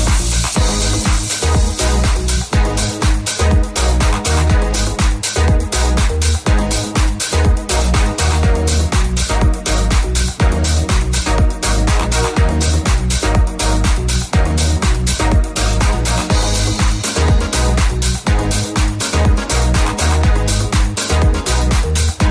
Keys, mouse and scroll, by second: 3.6 3, 4.7 ctrl+KP_Add, 5.5 shift+d, 6.4 p, 6.9 Tab, 8.1 Tab, 8.1 middle click, 10.0 click, 10.0 s, 10.3 click, 10.8 click, 11.4 right click, 11.5-17.5 middle drag, 15.6 Tab, 17.5-19.0 shift+drag, 19.5-22.3 right drag, 19.5 w, 21.6 ctrl+a.